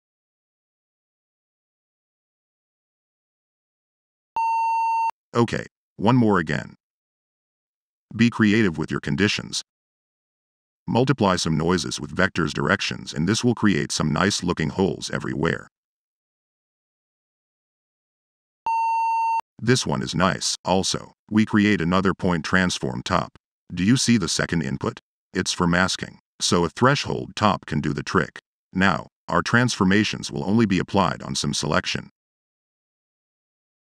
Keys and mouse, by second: 10.0 0, 10.4 click, 11.2 click, 11.7 click, 12.1 click, 12.5 click, 16.2-16.8 drag, 17.0 0, 17.2 click, 20.5 click, 21.0 p, 22.1 drag, 22.9-23.3 drag, 23.4 click, 24.0 click, 24.0-24.9 typing, 26.9 BackSpace, 27.2 h, 28.0 drag, 28.8 click, 29.0 click, 29.2 click, 29.7 click, 30.0-30.5 drag, 30.5 click, 30.7 drag, 30.9 drag, 31.3 drag, 31.7 click, 32.2 click, 32.7 click, 33.6 middle click.